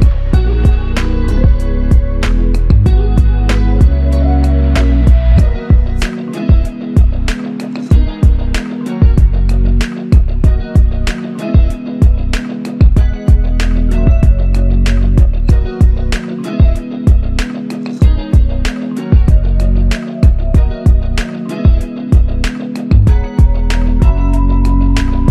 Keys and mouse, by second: 2.3 alt+click, 3.6 double click, 5.3 alt+click, 11.3 alt+shift+click, 12.0 ctrl+alt+click, 12.8 alt+click, 19.3 alt+click, 24.6 alt+click.